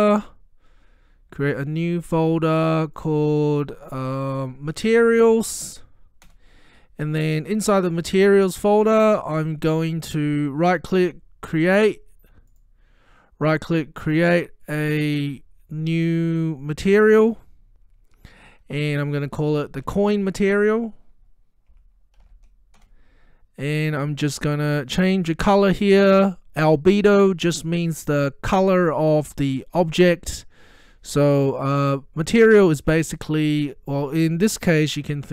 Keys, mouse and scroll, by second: 1.9 click, 4.7-6.2 typing, 6.3 Return, 8.0 click, 11.0 right click, 12.5 click, 17.2 click, 19.9 click, 20.0 typing, 21.5-22.8 typing, 22.9 Return, 25.4 click.